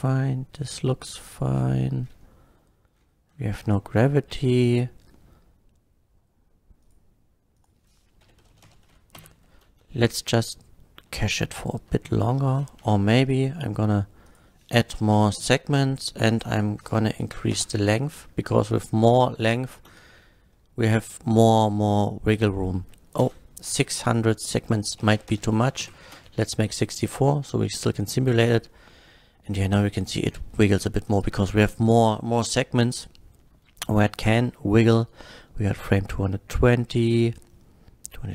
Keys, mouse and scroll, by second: 1.2 scroll down 1, 3.3 scroll up 1, 6.8 click, 7.6 click, 8.3 KP_5, 8.5 KP_0, 8.6 Return, 8.6 KP_0, 9.2 shift+Left, 9.6 space, 11.4-11.8 shift+middle drag, 12.3 space, 12.8 shift+Left, 12.8 space, 14.3 click, 15.0 KP_6, 15.1 KP_4, 15.3 Return, 15.3 KP_4, 16.3 click, 17.3 KP_8, 17.5 Return, 17.8 KP_8, 18.2 middle click, 18.7 click, 18.9 middle click, 19.5 middle click, 19.9 space, 23.3-26.1 typing, 24.0 click, 25.3 Return, 25.8 shift+Left.